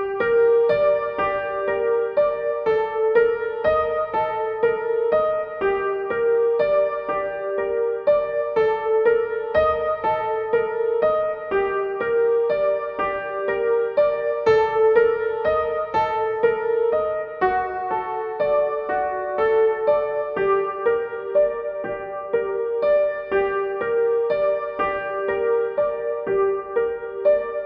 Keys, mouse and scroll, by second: 2.0 click, 5.1 click, 9.3-20.2 drag, 20.2 Left, 21.3 click, 21.7 Left, 22.5-25.7 drag, 26.0 click.